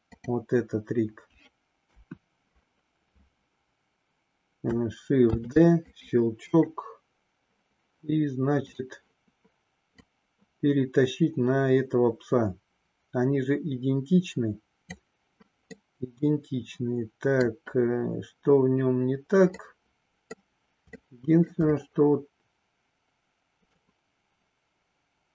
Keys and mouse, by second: 1.8 KP_1, 5.4 shift+d, 5.9 click, 6.6 right click, 10.0-14.9 drag, 15.7-17.6 middle drag, 19.7 middle click, 21.0 shift+middle click, 23.7-25.3 middle drag.